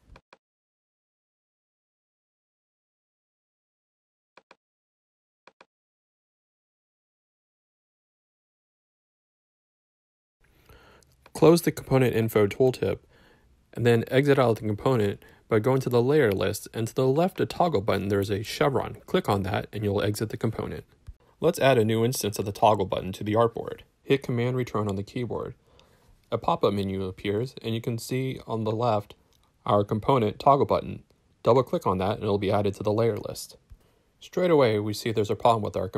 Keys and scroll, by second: 0.7-2.1 typing, 2.7 super+space, 2.8 super+a, 3.1 super+c, 6.3 super+v, 24.1 super+Return.